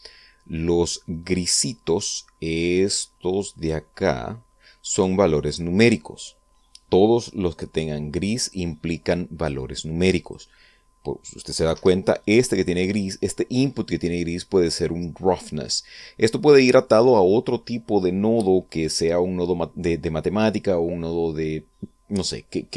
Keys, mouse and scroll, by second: 2.5-5.8 drag, 9.3-10.2 drag, 10.8 click, 12.3 Escape.